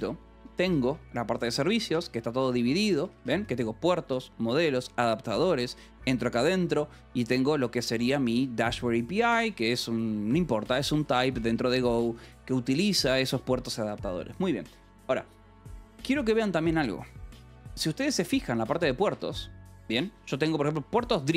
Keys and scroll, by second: 0.0-4.0 typing, 5.2 j, 5.7 Return, 6.6 j, 8.5-11.9 typing, 9.6 Escape, 10.9 Escape, 11.7 Escape, 13.0 j, 13.6 Escape, 17.2 :, 17.8 k, 18.2 j, 18.3 Return, 19.6 :, 20.1 Return.